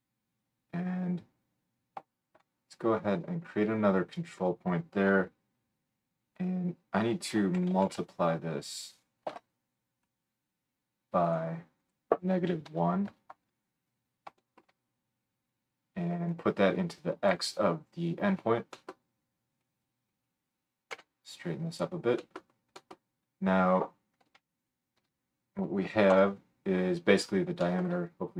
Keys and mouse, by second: 2.1-24.2 shift+right drag, 3.8-11.3 drag, 3.8-11.3 middle drag, 11.8-21.8 drag, 11.8-21.8 middle drag, 20.9 g, 24.6 alt+shift+middle click, 26.1 KP_7.